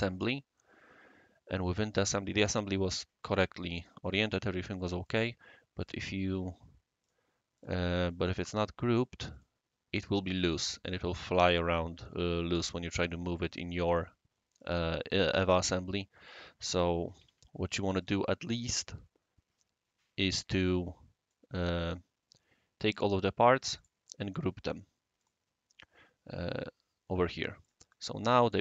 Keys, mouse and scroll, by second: 0.5-2.1 right drag, 4.5-5.1 right drag, 5.8 right click, 7.0 click, 7.5 click, 8.1 click, 9.3 click, 14.5 click, 16.2 click, 17.2 ctrl+z, 18.0 click, 18.5 scroll up 1, 19.2 scroll up 1, 19.3 scroll down 2, 19.4 scroll up 1, 19.7 scroll down 1, 21.3 click, 23.8 click, 24.3 right click, 25.2 click, 27.6 click, 27.9-28.6 drag.